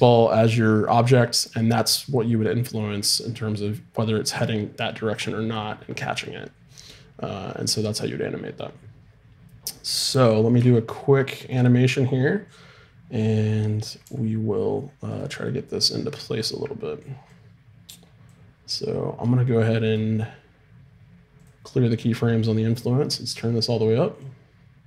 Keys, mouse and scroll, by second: 10.7-14.0 middle drag, 14.0 r, 17.4-19.1 drag, 21.4 right click, 23.0-24.8 drag.